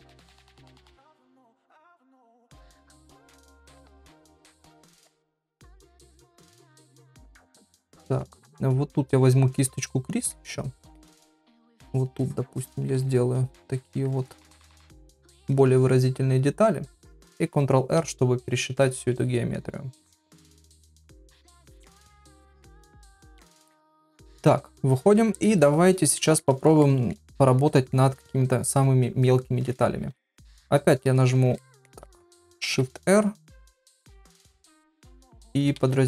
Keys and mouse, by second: 0.4 middle click, 1.2 click, 1.5 click, 1.9 click, 2.5 click, 2.9 middle click, 3.5 shift+middle click, 4.2 click, 4.8 click, 5.3 shift+middle click, 5.9 click, 6.2 click, 6.5 click, 6.9 click, 7.2 middle click, 7.6 ctrl+middle click, 10.2 click, 11.5 ctrl+click, 11.9 ctrl+click, 12.2 ctrl+click, 12.5 ctrl+click, 14.3 middle click, 14.9 ctrl+click, 15.2 ctrl+click, 15.4 ctrl+click, 24.8 KP_Divide, 25.7 ctrl+middle click, 26.4 middle click, 26.8 shift+middle click, 27.6 middle click, 30.0 shift+r, 31.6 ctrl+middle click, 32.1 middle click, 32.6 shift+r, 34.6 shift+r, 35.7 shift+r.